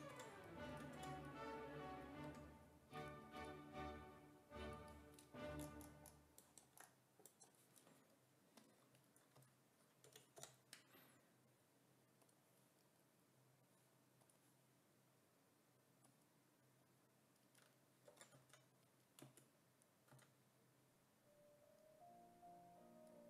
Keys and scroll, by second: 0.0-2.3 typing, 9.4 s, 10.1 b, 10.4 i, 18.1 5, 18.4 s, 20.2 w.